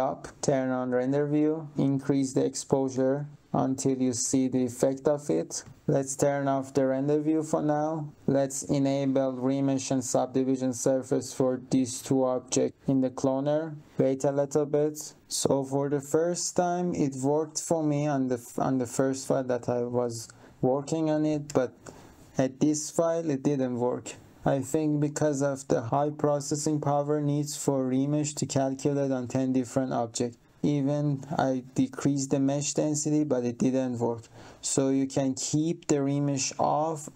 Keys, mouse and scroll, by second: 0.8 click, 2.2 click, 2.9 2, 3.0 Return, 3.5 click, 5.6 7, 7.0 click, 10.4 click, 10.9 click, 11.7 click.